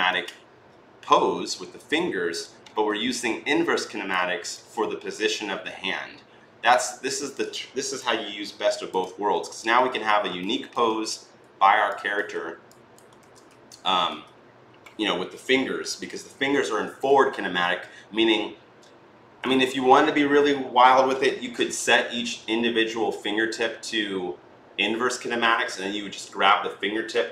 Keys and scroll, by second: 11.2 r, 13.0 ctrl+z, 13.2 w, 13.9 w.